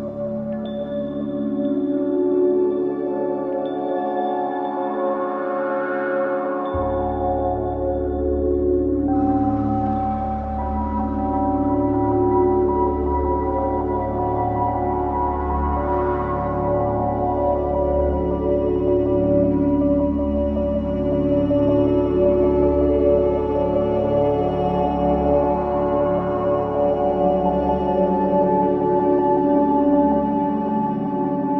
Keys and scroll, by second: 3.9 ctrl+z, 20.4 ctrl+z.